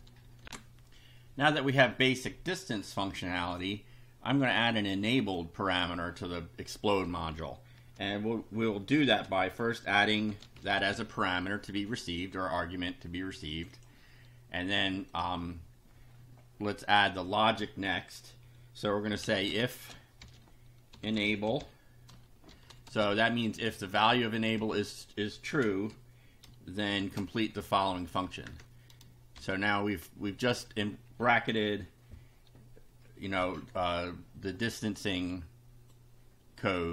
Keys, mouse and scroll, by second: 0.4 ctrl+r, 5.2 click, 7.7 ,, 9.1-11.2 typing, 13.5 click, 15.1 click, 16.8 click, 18.9-22.9 typing, 24.0 Left, 24.6 Right, 25.7 space, 27.0 shift+[, 27.5 shift+Down, 28.5 shift+Return, 29.3 shift+], 34.8-36.1 drag.